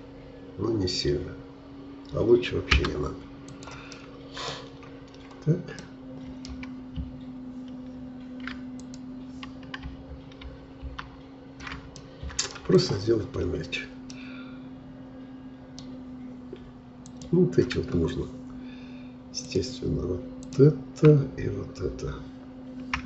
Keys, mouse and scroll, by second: 3.4 click, 3.9 middle click, 4.8-5.8 scroll up 4, 5.8-8.8 middle drag, 8.8-10.4 drag, 10.4 ctrl+z, 10.8 ctrl+z, 12.0 middle click, 12.7 click, 13.4-14.1 scroll down 2, 14.1-17.0 middle drag, 17.0 click, 17.9 scroll up 2, 19.5-23.0 drag.